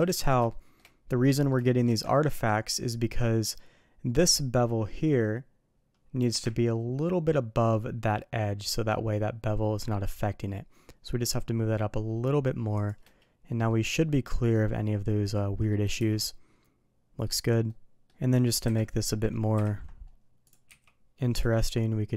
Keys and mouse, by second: 0.0 middle click, 0.5 shift+middle drag, 1.2 middle click, 1.6 shift+middle click, 2.1 ctrl+middle click, 13.6-15.7 middle drag, 15.9 shift+2, 16.2-17.2 middle drag, 17.6-18.0 middle drag, 18.6 KP_1, 20.4 click, 20.6 d.